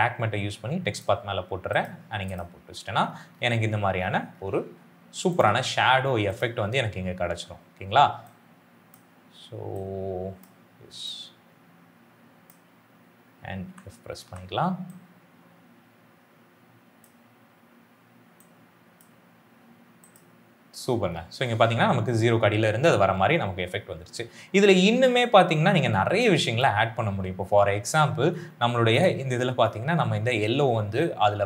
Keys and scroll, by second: 13.6 f, 25.8 space.